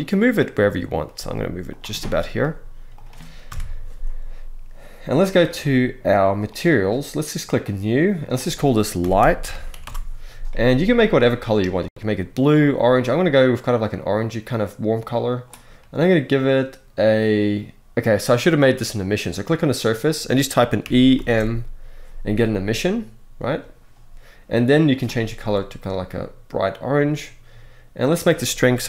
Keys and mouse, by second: 0.4 middle click, 0.9 g, 1.7-2.1 middle drag, 2.1 g, 3.2 KP_0, 6.3 click, 7.5 click, 8.0-9.6 drag, 9.6 ", 19.4 click, 20.8 m, 21.0 m, 23.1-23.9 drag, 24.5 click, 27.7-28.8 drag.